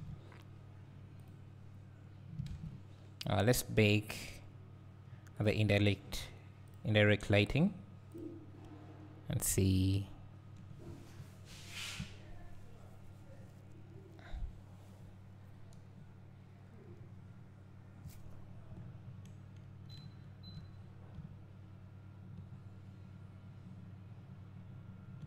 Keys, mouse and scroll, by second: 0.5 s, 1.3-2.1 drag, 2.1 scroll down 2, 3.0 ctrl+s, 11.1-17.8 drag, 16.9-18.2 scroll up 2, 18.2-21.2 drag, 18.2-20.0 scroll down 2, 20.0 `, 20.8-21.1 scroll up 1, 21.2 `, 22.2-23.2 drag, 23.2-25.2 drag.